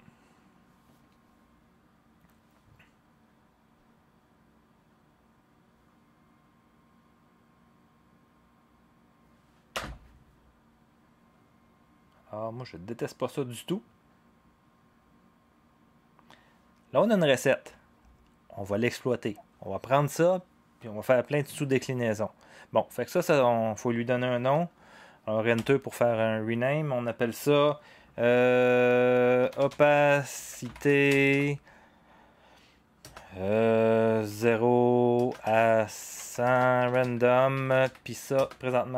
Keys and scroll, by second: 9.7 0, 17.6 0, 25.5 Return, 29.1-31.8 typing, 34.3-38.3 typing.